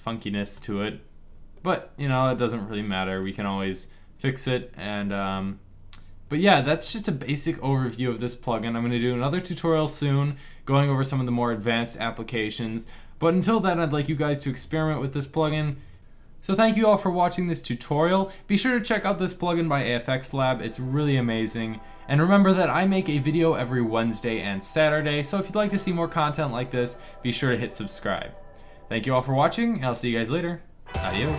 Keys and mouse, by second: 4.7 middle click, 12.6-14.3 middle drag.